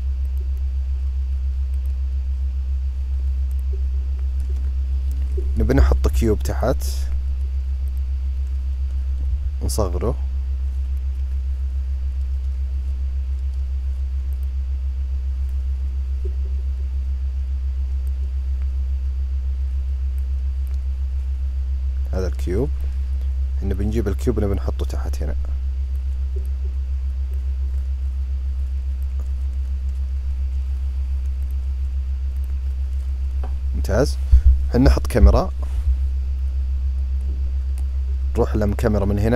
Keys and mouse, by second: 1.4 click, 5.5 shift+a, 9.0 s, 15.2-22.5 drag, 23.5-24.3 drag, 25.7 click, 27.0-31.2 drag, 32.0 click, 34.9 ctrl+alt+KP_0.